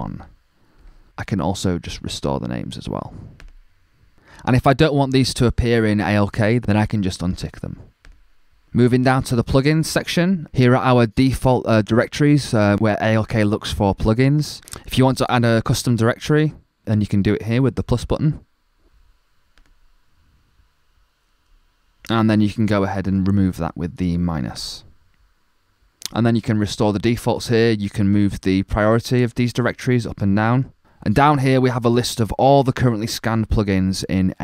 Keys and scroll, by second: 0.0-0.1 typing.